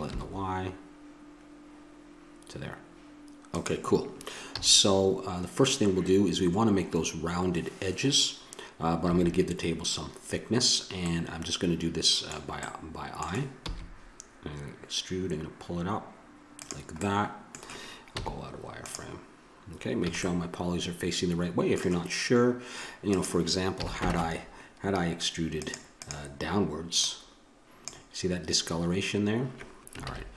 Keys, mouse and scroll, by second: 2.1-3.1 drag, 4.4 a, 9.1 a, 11.1 middle click, 13.6 e, 17.0-18.9 middle drag, 18.2 z, 20.0 a, 20.2 middle click, 23.1-24.1 drag, 23.7 a, 24.1 ctrl+Tab, 26.0-28.8 drag, 30.0 ctrl+z.